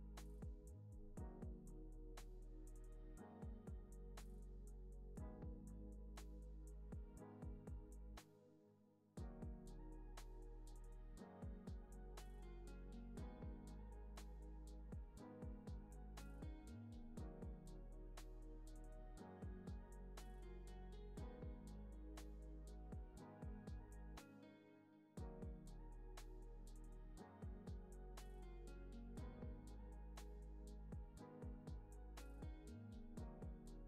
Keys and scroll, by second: 0.4 x, 0.8 space, 8.8 space, 14.5 space, 15.6 x, 17.1 x, 18.5 x, 20.3 z, 21.0 x, 21.6 z, 22.0 x, 23.2 x, 23.6 z, 24.2 x, 26.3 Left, 28.0 z, 28.7 Left, 30.2 space.